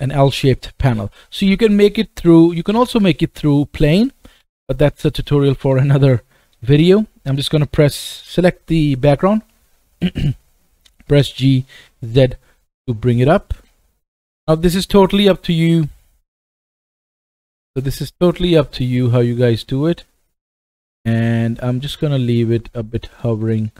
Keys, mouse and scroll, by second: 2.6 shift+a, 5.2 middle click, 6.7 g, 14.6-18.4 right drag, 14.6 KP_1, 15.9 middle click, 17.2 KP_1, 18.0-18.5 scroll up 3, 18.4-20.9 shift+middle drag, 20.2 scroll up 2, 20.6 shift+right click, 20.9 shift+right click, 21.2-21.7 middle drag, 22.2-22.6 scroll up 2, 22.3-23.7 middle drag.